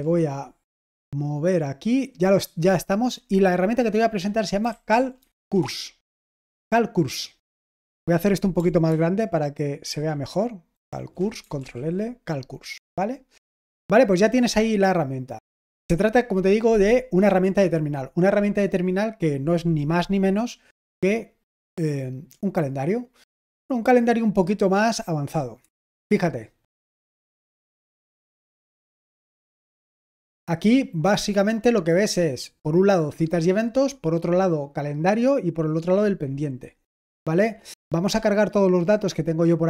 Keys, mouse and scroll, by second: 4.4-5.9 typing, 9.9 ctrl+alt++.